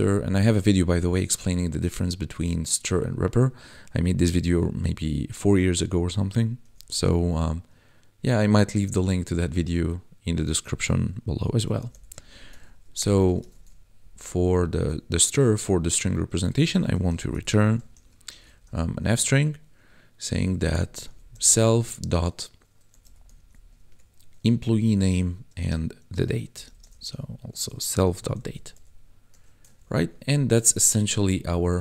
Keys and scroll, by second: 6.6 ctrl+s, 11.2 s, 11.6 e, 12.2 Right, 12.6 shift+;, 12.9 Return, 13.3 ctrl+s, 14.0 ctrl+Down, 16.6-18.6 typing, 20.5 shift+[, 20.8 s, 21.0 e, 21.6 ., 22.9 e, 23.0 m, 23.2 p, 23.8 Tab, 25.5 space, 26.5-28.7 typing, 29.7 ctrl+s, 30.1 Escape, 31.2 ctrl+Pause.